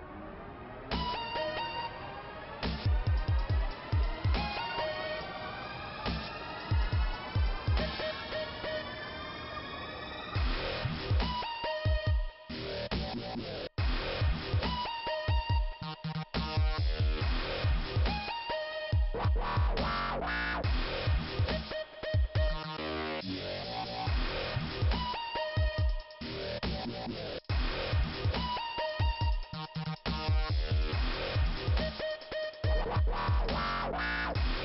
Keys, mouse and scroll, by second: 0.1 click, 2.1 click, 3.0 scroll down 1, 4.2 ', 5.4 click, 6.4 click, 6.7 right click, 7.3 click, 10.1 scroll down 2, 11.9 click, 13.5 scroll up 2, 15.9 click, 16.9 click, 21.4 click, 22.2 click, 23.3 click, 25.7 click, 28.1 click, 28.8 click, 30.3 |, 31.0 middle click, 31.8-32.8 scroll up 2, 34.0 click.